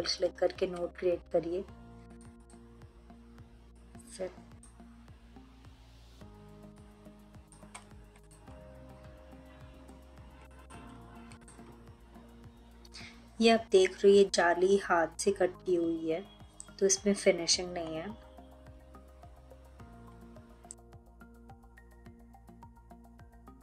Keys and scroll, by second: 21.0 3, 21.5 ctrl+z, 23.4 ctrl+l.